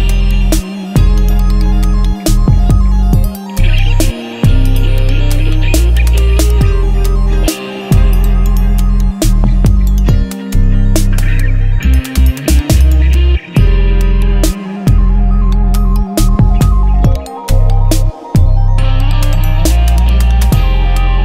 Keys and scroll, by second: 3.7-5.2 typing, 9.6 shift+F10, 15.8-18.3 typing, 20.2-21.2 typing.